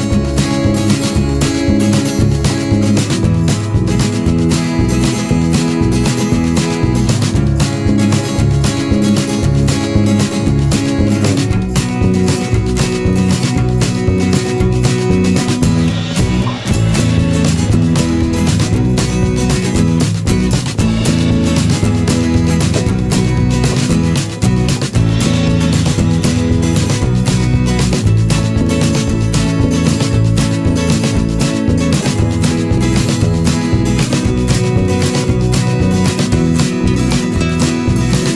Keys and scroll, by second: 9.1 ctrl+z, 29.5 ctrl+-.